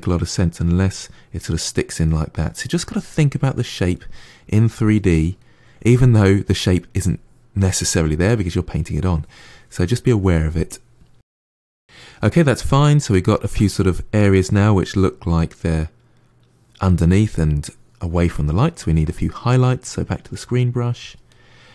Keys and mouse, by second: 0.1 middle click, 0.3 click, 0.7-1.8 middle drag, 1.8-3.0 drag, 3.0 middle click, 3.3 click, 3.9 middle click, 4.3 click, 4.6 middle click, 4.9 click, 5.3 middle click, 5.4 click, 5.7 middle click, 5.9 click, 6.1 middle click, 6.3 click, 6.9 middle click, 7.3 click, 7.5 middle click, 7.9 click, 8.1 middle click, 8.3 click, 8.4-11.5 middle drag, 12.1-19.7 middle drag, 19.7-21.2 drag, 21.2 middle click.